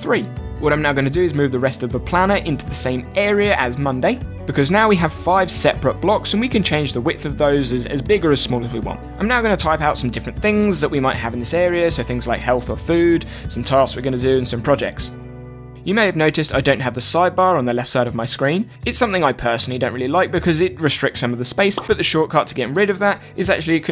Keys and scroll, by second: 9.3-13.8 typing, 15.4-23.9 typing.